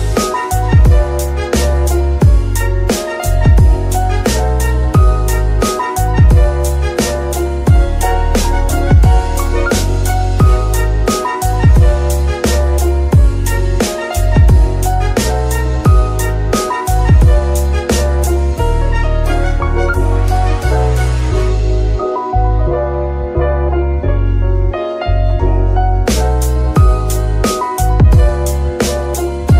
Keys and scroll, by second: 2.8 shift+g, 3.2 Escape, 11.9 g, 13.1 s, 14.0 Tab, 14.5 s, 16.3 shift+Tab, 20.1 Escape, 20.4 s, 21.4 Tab, 22.4 Tab.